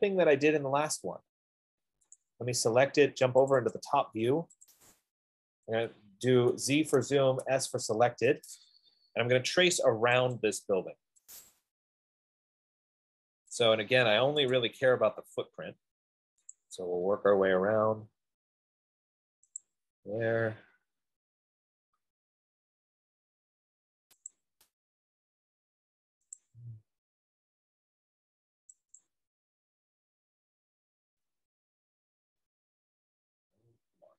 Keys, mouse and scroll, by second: 0.1 middle click, 1.2 middle click, 2.6 click, 3.9 click, 4.2 click, 5.0 click, 5.1 click, 6.8-8.1 typing, 7.6-11.3 drag, 11.3-12.1 typing, 12.2 scroll, 13.4-13.7 scroll, 14.7 middle click, 14.9 click, 17.4 click, 17.9 middle click, 19.9 click, 20.5-21.2 scroll, 21.8-22.2 scroll, 22.7 middle click, 24.7 click, 26.7 click, 29.4 click, 30.1 middle click, 30.5 middle click, 30.6 middle click, 30.7 middle click, 30.9-31.6 scroll.